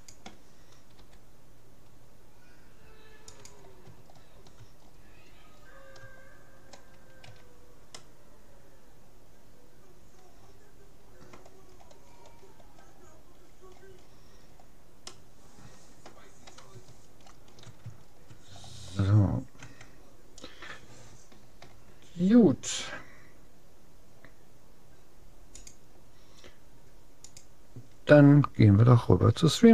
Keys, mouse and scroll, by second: 1.0 g, 4.2 middle click, 7.2 a, 8.0-9.6 middle drag, 11.8-14.8 middle drag, 15.2-16.8 middle drag, 17.0-18.5 middle drag, 18.5 scroll up 1, 19.6 Tab, 19.6 middle click.